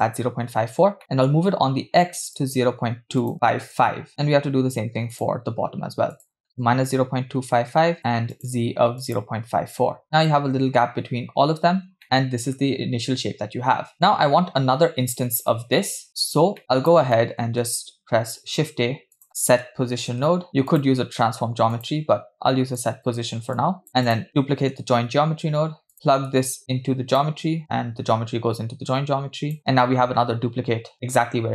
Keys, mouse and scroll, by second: 1.0 middle click, 1.4 scroll up 2, 2.3-3.7 drag, 4.1 middle click, 4.1-4.4 scroll down 1, 5.2-10.0 drag, 10.0 scroll down 3, 10.0 BackSpace, 10.3-10.8 shift+middle drag, 11.1-11.7 scroll up 2, 12.0-12.7 middle drag, 12.0 scroll down 1, 13.1-13.9 scroll down 2, 15.8-16.6 scroll down 3, 16.6 scroll down 4, 16.6 click, 16.6 middle click, 17.1 middle click, 18.3 shift+a, 22.1-22.7 scroll down 2, 22.8-23.1 drag, 23.6 click, 24.1 click, 24.9 shift+d, 25.9-27.2 drag, 27.6-29.6 drag, 30.3-31.5 scroll up 3.